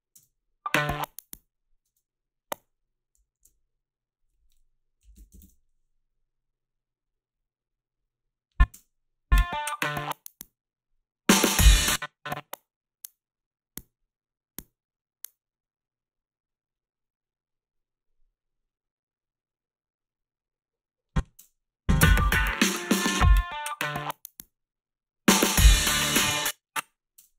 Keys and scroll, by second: 0.2 space, 1.8 space, 4.8-5.8 typing, 8.8 space, 11.6 space, 21.4 space, 26.2 space, 27.2 space.